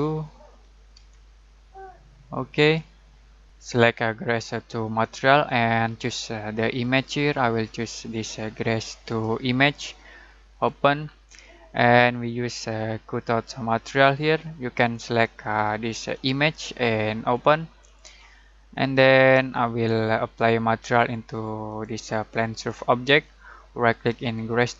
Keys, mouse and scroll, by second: 0.0-0.9 typing, 2.5 click, 6.8 click, 13.3 click, 16.1 click, 21.6 click, 23.9 right click.